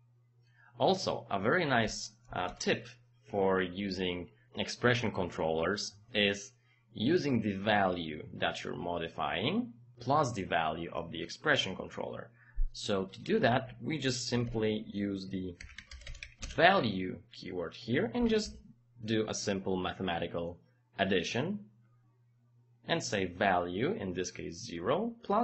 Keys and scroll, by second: 2.3 KP_0, 2.4 Return, 14.5 Home, 15.4-16.7 typing, 18.1 KP_Add.